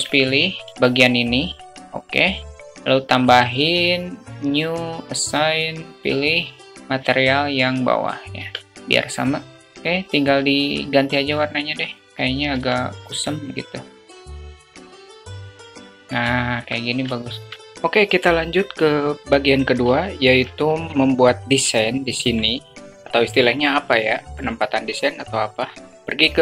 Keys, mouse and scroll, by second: 0.4 a, 8.2 Tab, 12.3 Tab, 15.3 Tab, 17.0 alt+shift+middle click, 18.4 shift+middle drag, 20.3 Tab.